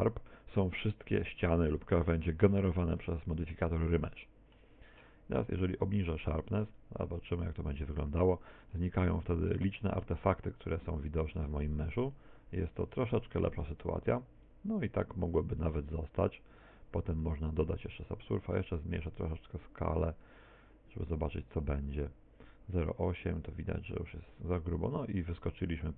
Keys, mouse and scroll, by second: 1.1 middle click, 1.9 middle click, 2.6 middle click, 3.1 middle click, 4.2 shift+middle click, 5.5 click, 10.9 click, 12.9 click, 18.1 click.